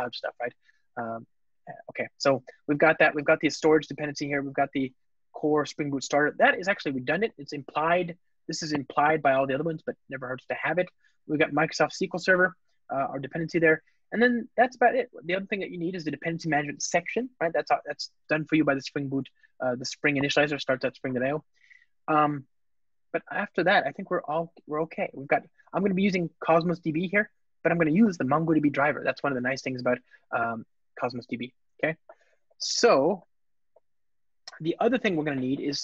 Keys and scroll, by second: 6.3 alt+shift+Left.